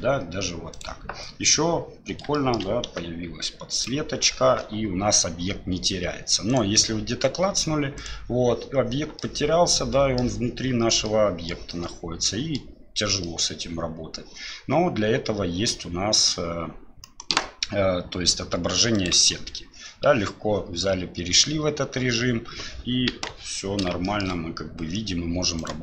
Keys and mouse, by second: 2.4 shift+click, 3.1 g, 6.5-8.0 drag, 8.0 right click, 9.2-10.2 middle drag, 11.0-11.5 middle drag, 11.7-12.6 middle drag, 13.2 middle drag, 19.0 click, 23.1 KP_1, 24.0 shift+middle drag, 25.6 click.